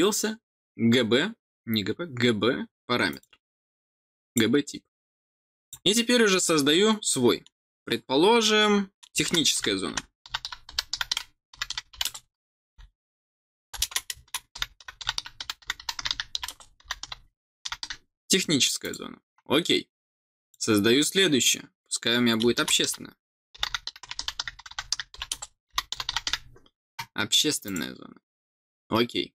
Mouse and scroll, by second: 3.0 click, 4.2 click, 5.5 click, 18.7 click, 20.4 click, 27.6 click.